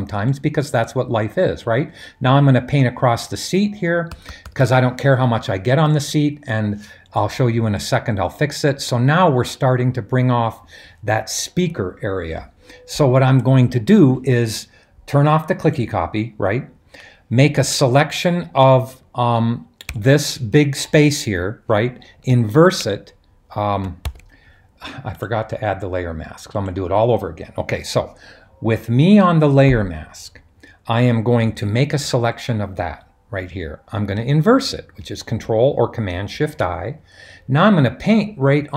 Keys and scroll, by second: 4.1-4.5 typing, 22.5 shift+super+i, 24.0 super+d, 36.3 shift+super+i.